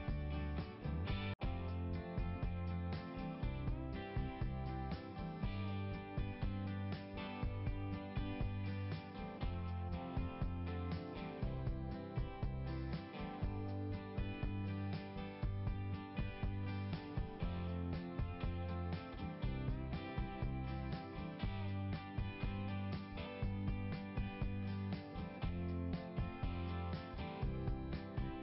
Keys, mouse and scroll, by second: 1.6 right click, 2.4 click, 5.0 click, 9.1 click, 9.3 click, 10.2 click, 12.2 click, 12.4 click, 15.1 click, 22.1 click, 22.6 click, 27.4 click.